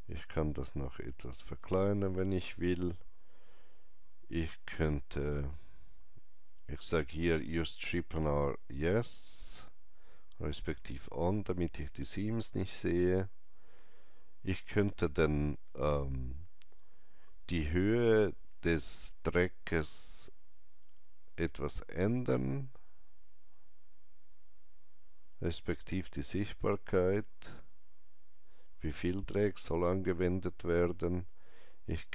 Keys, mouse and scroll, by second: 7.6-10.2 drag, 7.6 alt+right click, 19.3-32.1 drag.